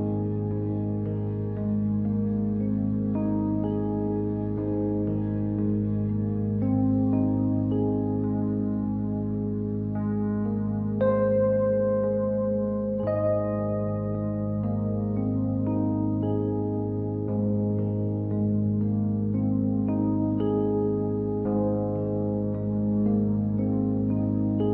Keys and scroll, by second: 1.2-2.1 typing, 4.5 ctrl+c, 5.2 ctrl+f, 8.7-12.7 typing, 16.5 ctrl+c, 17.1 ctrl+f, 21.5 Delete, 21.6 Delete, 21.7 Delete, 21.8 Delete, 22.0-22.9 typing.